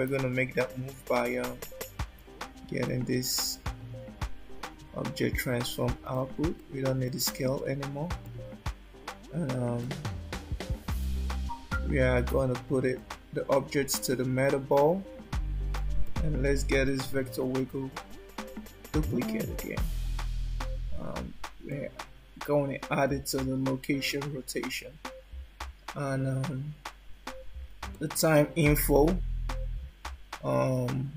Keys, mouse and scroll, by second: 0.1 shift+d, 6.3 click, 6.7 click, 7.1 click, 7.7 click, 8.3 click, 9.9 click, 11.2 click, 16.1 click, 17.4 shift+d, 21.8 click, 28.1 shift+middle click.